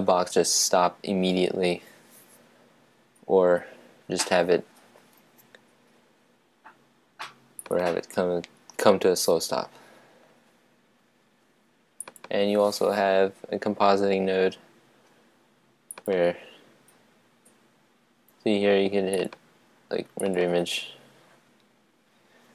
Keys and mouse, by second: 15.9-22.5 drag.